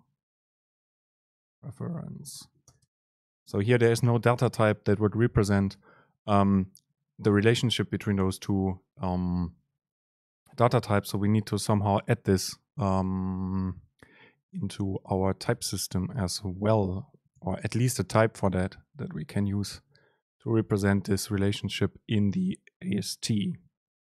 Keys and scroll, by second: 2.8 super+space, 17.5 shift+Left.